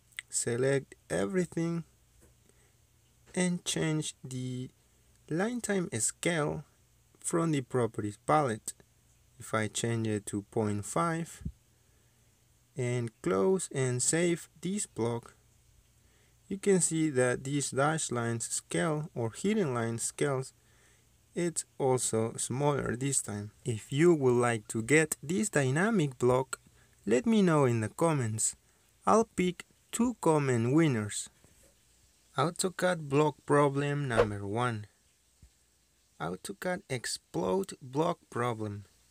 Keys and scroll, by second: 1.8 ctrl+a, 10.3 KP_Decimal, 10.4 KP_5, 11.0 Return, 13.1 Escape.